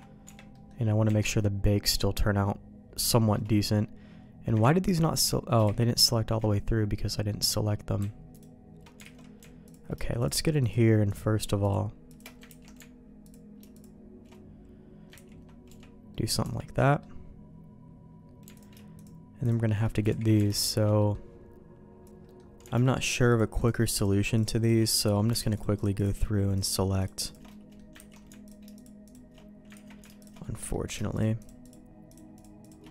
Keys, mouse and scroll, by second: 0.2 Tab, 0.5 middle click, 1.0 Tab, 1.3 middle click, 3.1 shift+middle click, 4.6 ctrl+z, 5.1 ctrl+z, 6.1 ctrl+z, 7.0 middle click, 8.3 alt+click, 9.1 alt+a, 10.1-11.6 alt+shift+drag, 12.4 ctrl+x, 13.2 click, 13.7 click, 15.1 ctrl+x, 15.6 Tab, 16.1 middle click, 16.4 Tab, 16.7 middle click, 18.5 alt+click, 20.1 ctrl+z, 20.5 alt+shift+click, 20.9 middle click, 22.2 middle click, 23.0 alt+shift+click, 23.5-24.7 alt+shift+drag, 24.8 middle click, 25.5 alt+shift+click, 25.9-27.3 alt+shift+drag, 27.5 middle click, 27.9 ctrl+x, 28.4 alt+click, 28.7 click, 29.7 ctrl+z, 30.2 alt+shift+click, 30.4 middle click, 31.1-32.7 drag, 32.8 middle click.